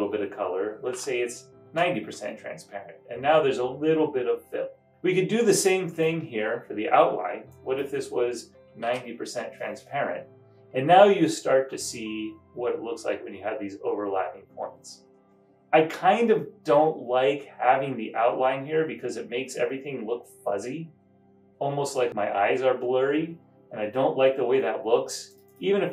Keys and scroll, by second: 0.7-1.4 typing, 1.7 Return, 4.7 typing.